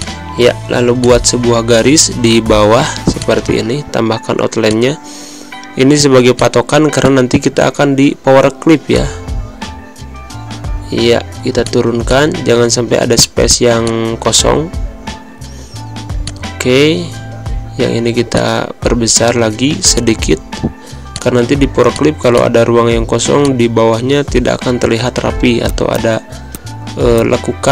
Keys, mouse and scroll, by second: 3.6 v, 4.5 click, 4.6-6.2 drag, 10.0 Down, 11.5 click, 13.9 click, 15.1 Down, 16.1 click, 18.2-25.1 drag, 25.1 shift+z, 25.6 click, 25.7 z, 25.9 click, 26.4 space, 26.4 click, 26.5 space, 27.1 click, 27.4 Pause.